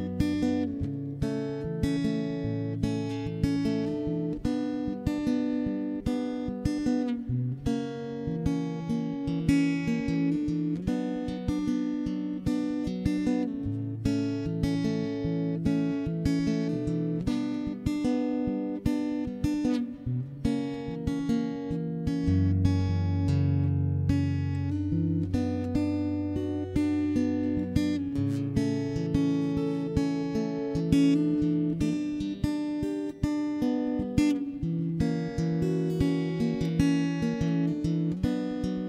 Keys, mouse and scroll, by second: 0.0 a, 0.8 alt+h, 0.9 middle click, 1.1 right click, 1.4 ctrl+z, 2.1 right click, 2.2 click, 2.4 middle click, 2.5-5.1 typing, 2.7 middle click, 2.9 ctrl+KP_3, 3.7 middle click, 4.2 Escape, 4.5 ctrl+0, 8.9 middle click, 9.5-10.5 middle drag, 10.7 ctrl+,, 10.8 middle click, 11.3 r, 12.0 middle click, 12.6 shift+b, 12.8 middle click, 13.6 ctrl+i, 13.9 c, 14.5 middle click, 14.7 shift+b, 15.3 r, 15.7 right click, 16.7-17.7 middle drag, 17.7 shift+b, 17.9 middle click, 18.4 a, 18.6 middle click, 19.1 ctrl+KP_1, 19.4 Tab, 19.6-22.1 typing, 19.8 Tab, 19.9 middle click, 20.4 right click, 20.8 middle click, 21.7 Escape, 21.9 Escape, 23.5-24.7 middle drag, 24.7 click, 25.6-27.3 middle drag, 26.7 ctrl+l, 27.1 a, 27.7 middle click, 27.7 alt+h, 28.1 middle click, 29.0 shift+l, 29.7 middle click, 30.2 shift+l, 30.3 middle click, 30.9 shift+h, 31.1 middle click, 31.2 c, 31.9 middle click, 32.1 click, 32.6 shift+b, 33.0-34.1 middle drag, 33.8 Tab, 34.3 alt+h, 34.5 middle click, 34.9 a, 35.0 right click, 35.4 shift+h, 35.7 middle click, 35.9 Escape, 35.9 click, 35.9 right click, 36.1 shift+space, 36.5 shift+space, 37.8 z, 38.3 shift+space.